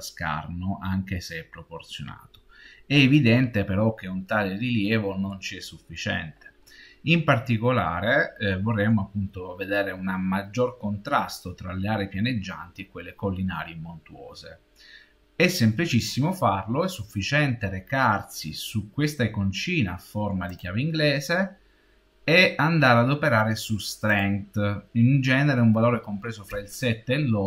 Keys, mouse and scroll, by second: 1.6 middle click, 2.0 middle click, 2.6 middle click, 20.4 click, 24.0 click.